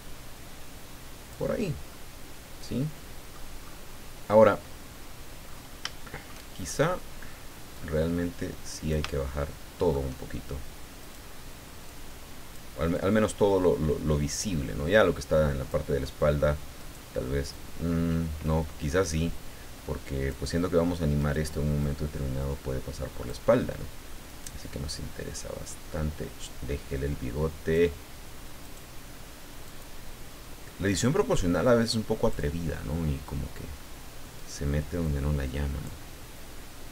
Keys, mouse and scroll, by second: 1.9-3.5 middle drag, 3.5-4.2 scroll up 1, 4.2-4.5 scroll down 1, 5.5 scroll up 2, 6.0 shift+middle click, 7.7-9.1 drag, 9.2 shift+middle click, 11.0 right click, 11.8 click, 12.9-14.1 drag, 14.1-14.4 scroll down 1, 16.8 right click, 17.5-19.1 drag, 19.1 scroll up 2, 21.2 right click, 21.8-23.5 drag, 24.3 right click, 24.9 click, 25.9-26.2 scroll up 1, 28.6 right click, 29.6 click, 30.9-32.5 drag, 34.4 right click, 35.0-36.0 drag.